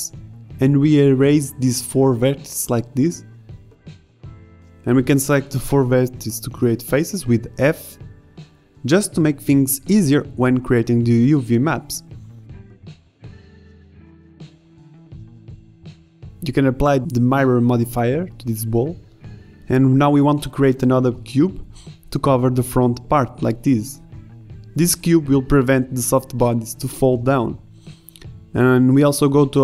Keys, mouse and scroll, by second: 2.6 Delete, 5.3 Delete, 8.6 f, 8.8 a, 10.9 f, 11.0 a, 12.0 f, 12.0 a, 13.0 middle click, 13.4-15.1 typing, 16.1 Tab, 19.1 shift+a, 19.3 s, 21.4 s, 22.6 KP_1, 22.7-23.1 middle drag, 23.8 z, 24.6 Tab, 25.4 a, 26.2 z, 26.7 right click, 27.4 middle click, 27.8 middle click, 28.4 middle click, 28.9 Tab, 29.2 z.